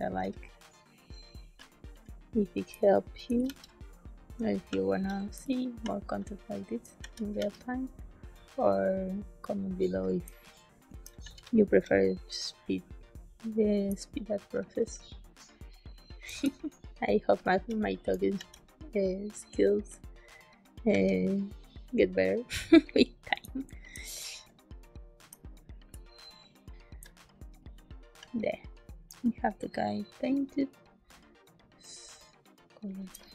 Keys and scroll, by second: 2.6 space, 3.4 e, 5.3 space, 6.9 b, 7.3 e, 10.0 a, 10.2 space, 11.1 b, 13.8 space, 16.4 space, 18.3 b, 20.8 b, 23.3 space, 25.2 space, 26.9 space, 33.0 space.